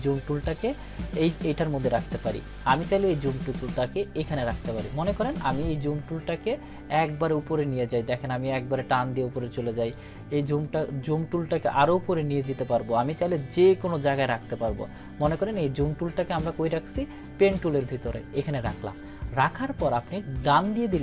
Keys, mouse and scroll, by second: 11.4-13.6 drag, 15.1-15.4 click.